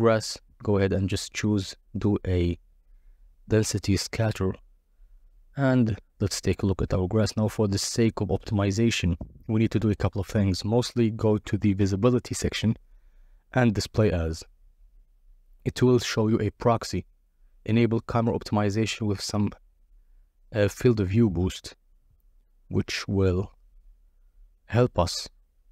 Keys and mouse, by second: 0.8-1.9 drag, 3.1 click, 4.4 ctrl+a, 5.2 ctrl+a, 11.6 click, 12.5 click, 13.8-15.4 drag, 16.4 click, 16.9 click, 18.2 KP_0, 19.2 z, 20.6 click, 23.9-25.4 drag, 25.4-25.7 middle drag.